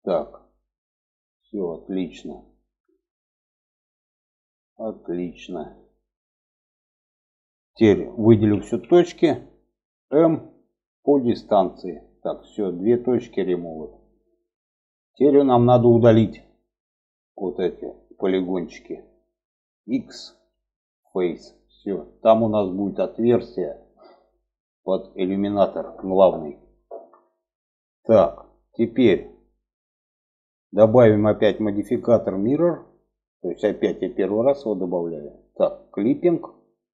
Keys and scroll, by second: 7.9 a, 9.4 m, 19.5 x.